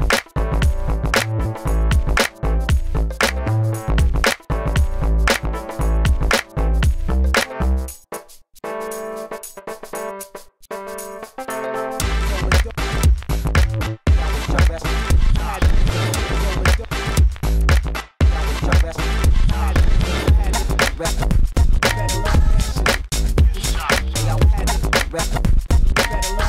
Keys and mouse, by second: 0.2-1.3 drag, 0.7 KP_1, 1.6 ctrl+s, 1.8 a, 1.9 b, 2.2 e, 3.3 s, 3.7 g, 4.5 e, 5.3-6.7 drag, 5.9 e, 6.2 s, 6.7 g, 7.3-8.3 drag, 7.7-13.2 typing, 10.0 click, 15.4 q, 16.8 g, 18.5 KP_1, 18.8 KP_3, 20.3 a, 20.7 g, 21.6 click, 24.0 click, 24.4 g, 25.4-25.8 a, 25.8 b.